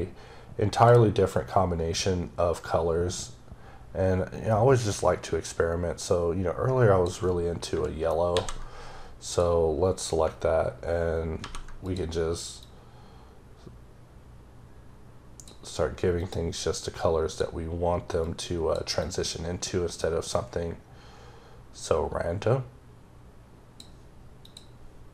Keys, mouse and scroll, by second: 1.2 click, 8.2 ctrl+c, 9.1 click, 11.2 ctrl+v, 11.7 click, 12.5 click, 16.0 click, 17.1 click, 18.1 click, 18.9 click, 24.3 click.